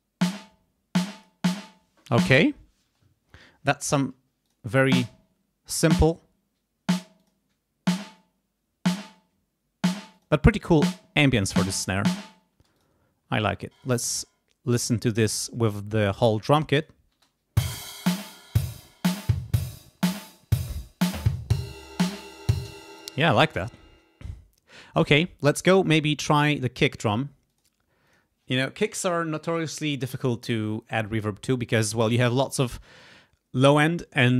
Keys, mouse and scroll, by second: 1.0 click, 2.9 space, 4.0 space, 4.4 click, 7.2 click, 10.1 click, 11.3 click, 12.5 space, 12.8 click, 13.8 click, 16.8 click, 17.1 space, 22.7 space, 25.8 click, 27.5 click, 28.1 click.